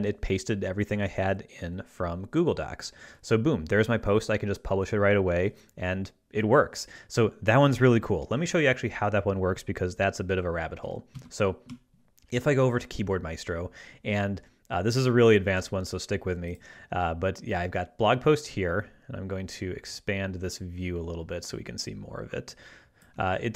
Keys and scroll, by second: 11.2 ctrl+Left.